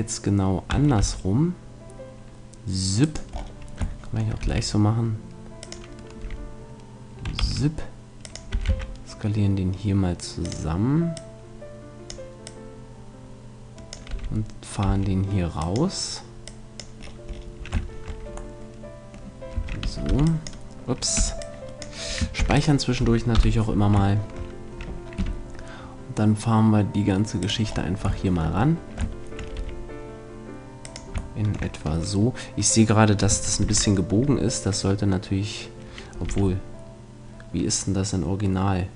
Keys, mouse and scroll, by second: 3.1-4.8 right drag, 4.0-6.0 middle drag, 4.4 s, 5.7-7.5 drag, 6.2 e, 8.3-10.2 drag, 8.5 s, 10.5-14.2 drag, 14.1 e, 16.4-18.3 drag, 18.3-19.6 middle drag, 19.6 a, 20.2 v, 21.2 b, 22.4 ctrl+s, 23.4 KP_7, 25.2 g, 27.5-29.2 drag, 28.3-31.0 middle drag, 29.6 r, 31.0-32.8 drag, 33.6 ctrl+z, 36.3 r.